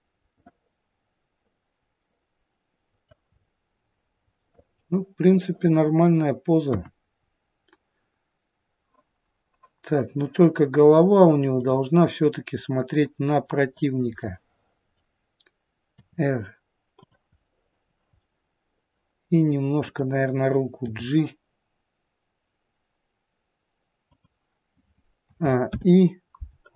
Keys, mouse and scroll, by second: 0.3 middle click, 3.3-3.7 scroll up 3, 4.4 middle click, 6.6 KP_1, 7.1-8.2 scroll down 3, 11.6 click, 13.7 click, 14.2 middle click, 15.9 r, 18.1 middle click, 19.8 click, 20.8 g, 25.2 a, 25.6 i.